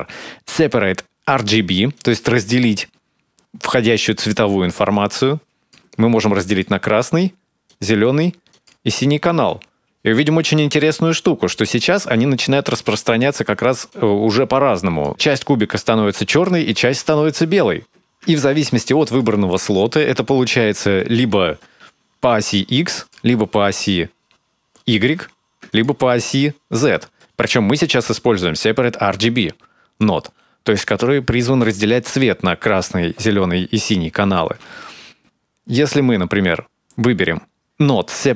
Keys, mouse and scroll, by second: 5.9 click, 7.5 ctrl+shift+click, 11.4 middle click, 15.0 middle click, 19.4 ctrl+shift+click, 22.0 middle click, 24.0 ctrl+shift+click, 27.9 middle click, 29.4 click, 35.6 shift+a.